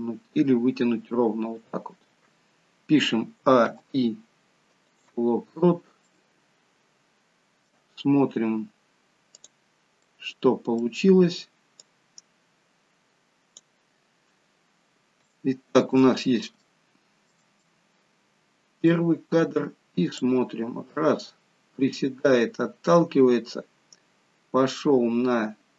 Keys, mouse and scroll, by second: 3.5 a, 3.7 i, 5.7-6.7 scroll down 3, 6.1 middle click, 9.5 click, 10.3 middle click, 11.9 click, 14.0-14.8 scroll down 4, 14.8-15.3 scroll down 1, 15.3 shift+middle click, 16.2-17.2 scroll up 3, 17.7 middle click, 20.2 click.